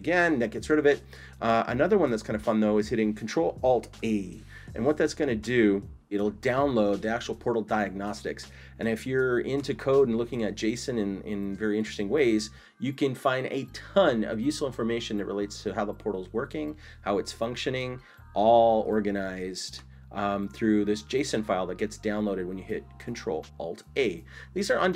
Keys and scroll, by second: 4.0 ctrl+alt+a.